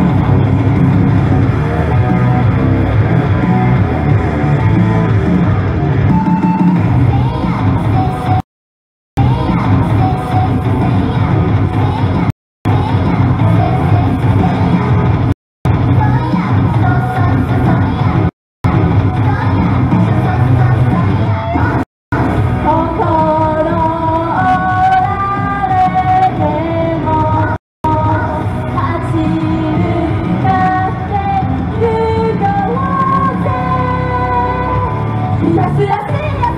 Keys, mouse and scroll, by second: 8.4 right click, 8.8 Return, 9.2 space, 12.3 right click, 12.5 Return, 12.7 space, 15.3 right click, 15.6 Return, 15.7 space, 18.3 right click, 18.5 Return, 18.7 space, 21.8 right click, 22.0 Return, 22.2 space, 27.6 right click, 27.8 Return, 27.9 space.